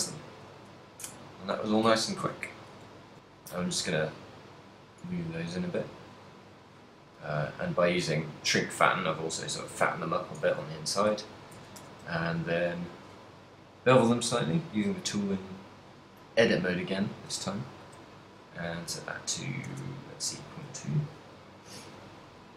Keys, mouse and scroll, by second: 0.2 shift+middle click, 0.8 middle click, 2.5 KP_3, 3.4 shift+click, 3.8 z, 4.1 middle click, 5.4 shift+middle click, 5.8 middle click, 6.3 z, 6.5 middle click, 7.4 KP_7, 10.8 shift+middle click, 11.2 a, 11.6 a, 11.8 w, 14.9 click, 16.7 click, 17.9 click, 21.1 middle click, 21.8 z, 22.2 middle click.